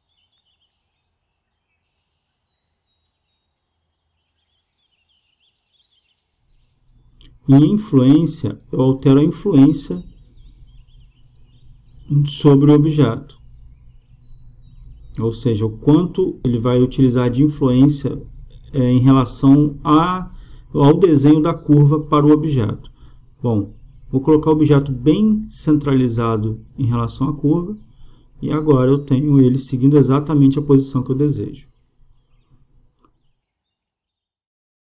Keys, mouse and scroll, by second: 1.3-4.7 drag, 8.8-10.7 drag, 13.2-15.0 drag, 18.2-20.1 drag, 20.2-22.0 drag, 23.9-25.6 drag, 27.0-29.1 drag, 31.2 click, 31.8 middle click.